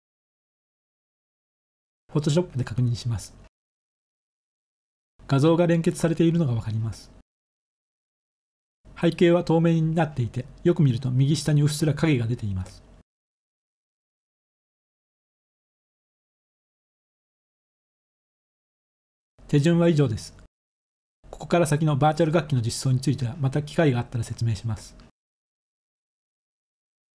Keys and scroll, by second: 4.9 ctrl++, 5.3 ctrl++, 5.5 ctrl++, 5.7 ctrl++, 5.9 ctrl++, 6.2 ctrl++.